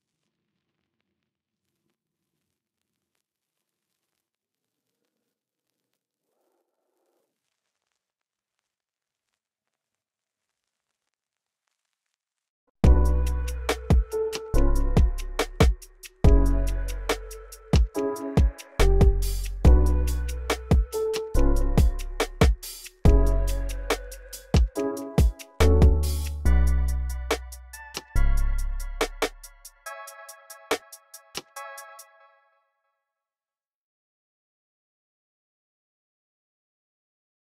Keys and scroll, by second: 12.1-12.6 typing, 13.7 typing, 16.8 super+r, 16.9-19.1 typing, 20.7 c, 24.5 super+r, 25.6 super+r, 27.7-30.0 typing, 29.3 alt+super+s, 31.7 space, 32.3 super+z, 33.4 y.